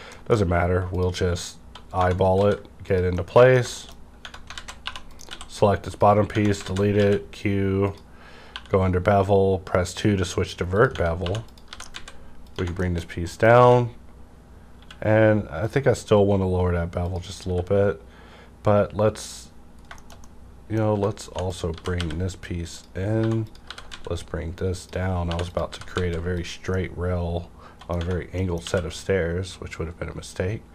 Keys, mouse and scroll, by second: 0.0 middle click, 0.8 click, 1.9 Tab, 2.3 s, 2.9 click, 3.1 middle click, 3.7 shift+middle click, 4.0 scroll up 1, 4.1 Tab, 4.1-6.9 typing, 4.5 alt+z, 5.0 click, 5.8 click, 6.2 Tab, 6.8 alt+z, 7.8 click, 8.5 2, 8.9 scroll up 1, 10.7 click, 10.9 Tab, 11.1-11.9 typing, 11.4 click, 12.4 click, 12.5 Tab, 12.7 shift+middle click, 13.1 scroll down 1, 13.2 middle click, 13.5 scroll up 1, 13.6 q, 14.7 q, 15.6 click, 17.1 click, 17.4 q, 19.8-20.2 scroll down 2, 19.9 shift+middle click, 20.7 scroll down 1, 20.9 Tab, 21.2-22.0 typing, 21.4 click, 22.6 click, 23.1-23.9 typing, 23.4 click, 24.8 click, 25.0-25.9 typing, 25.5 click, 26.4 click, 26.6 scroll up 2, 26.7 middle click, 27.9 scroll down 1, 28.0 Tab, 28.0 -, 28.3 middle click, 28.6 q.